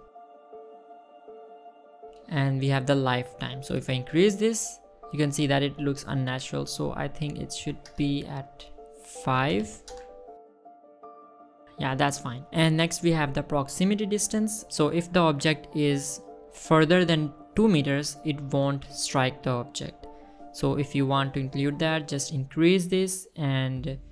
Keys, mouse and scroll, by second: 1.4 click, 2.4 click, 2.7 space, 3.6 space, 4.3 click, 5.1 space, 6.1 space, 6.7 click, 6.9 space, 8.3 space, 9.2 click, 10.6 click, 12.0 click, 12.2 space, 12.8 space, 13.2 middle drag, 14.8 scroll down 2, 16.5-16.9 middle drag, 17.2-18.6 scroll up 1, 19.9-21.9 drag, 22.6-24.1 drag.